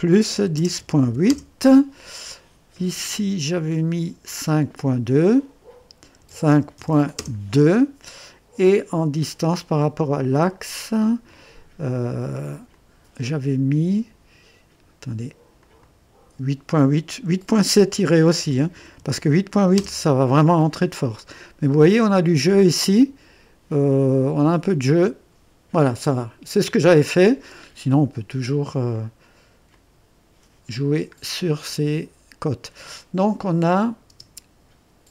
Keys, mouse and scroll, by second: 0.3-1.0 typing, 1.3 Return, 4.8 click, 6.2 KP_5, 6.8 KP_2, 7.2 Return, 7.2 KP_Enter, 9.5 typing, 10.2-11.3 right drag, 12.7 click, 15.6 click, 18.4-20.1 typing, 21.1 scroll up 1, 21.7 right click, 21.7 typing, 28.9 click, 29.7 click, 30.7 scroll down 1, 31.2 scroll up 1, 31.7-33.1 drag, 33.6 click, 34.1 space.